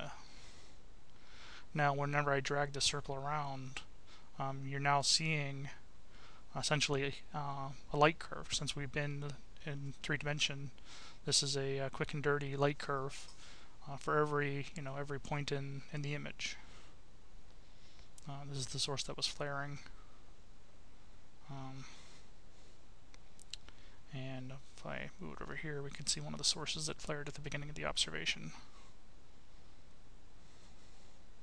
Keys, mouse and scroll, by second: 0.4 click, 1.4-2.9 drag, 3.6-7.4 drag, 12.2-16.1 drag, 16.8-18.6 drag, 19.2-20.8 drag, 22.1-24.5 drag, 25.5-27.8 drag, 28.7-31.4 drag.